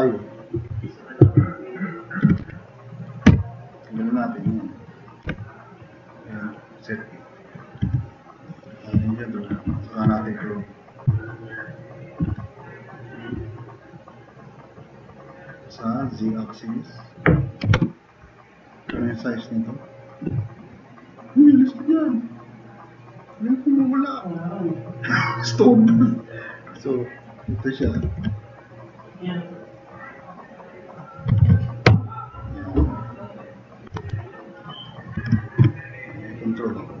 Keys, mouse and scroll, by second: 0.7 alt+q, 1.2 alt+q, 2.0 click, 2.1-3.3 typing, 2.8 click, 3.0 click, 3.4 click, 5.0-5.7 typing, 7.6-8.3 typing, 17.7 0, 17.8 Return, 27.1 click, 27.9 ctrl+c, 28.1 ctrl+c, 31.4 ctrl+v, 31.9 Return, 34.0 alt+q.